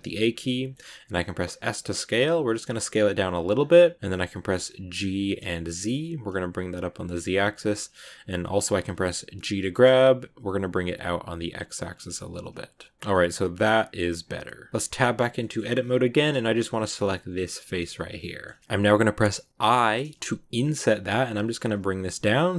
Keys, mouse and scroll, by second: 0.2 scroll up 1, 0.3-1.4 middle drag, 1.4 s, 3.6 middle click, 4.4-4.9 scroll up 1, 4.9 g, 7.7-9.5 middle drag, 9.5 g, 12.0 middle click, 13.0 scroll up 1, 13.0-14.8 middle drag, 14.8 Tab, 15.3 middle click, 15.4 scroll up 2, 16.7 right click, 17.6-19.5 shift+middle drag, 19.5 i.